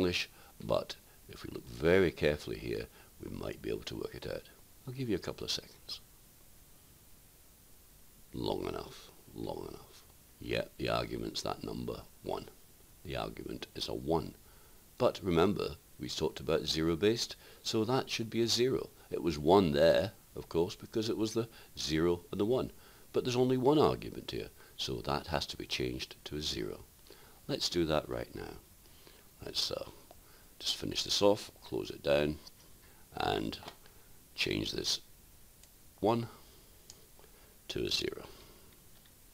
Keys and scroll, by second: 35.9 1.